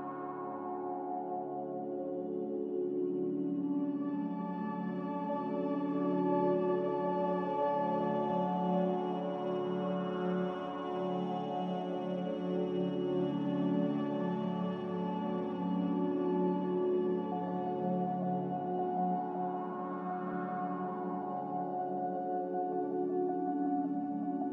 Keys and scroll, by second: 2.5 ctrl+z, 21.0-21.9 typing.